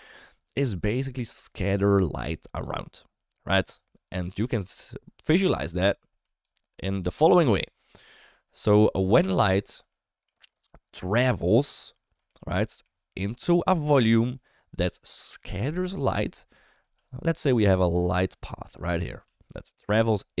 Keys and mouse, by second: 6.1 d, 6.3 click, 7.0 d, 7.2-9.2 right drag, 9.2 d, 9.6-10.2 shift+middle drag, 12.2-12.7 shift+middle drag, 13.4 shift+middle click, 16.9 d, 17.3-19.0 drag, 19.0 d, 19.2 d, 19.4-20.4 drag.